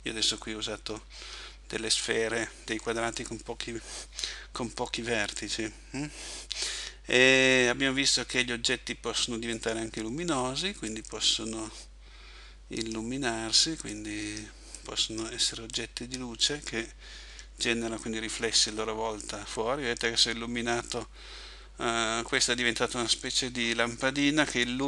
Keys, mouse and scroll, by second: 1.3 Escape, 9.6 right click, 11.0 click, 14.0 click.